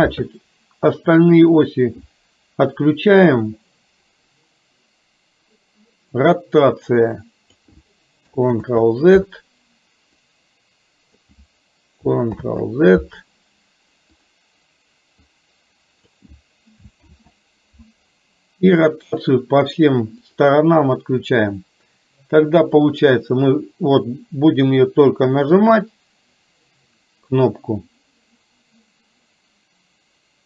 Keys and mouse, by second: 0.9 click, 1.7 click, 6.8 click, 8.7 ctrl+z, 10.3-11.3 drag, 12.3-14.3 ctrl+drag, 15.2-16.2 drag, 17.2 ctrl+z, 19.0 click, 19.7 click, 20.3 click, 23.0-30.4 drag.